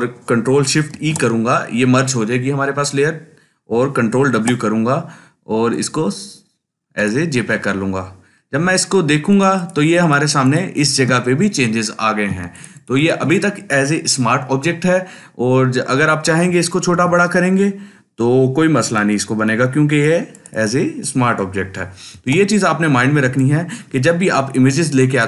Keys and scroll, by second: 0.9 ctrl+shift+e, 4.3 ctrl+w, 9.1 ctrl+space, 9.6 ctrl+space, 16.9 ctrl+t, 22.1 ctrl+t.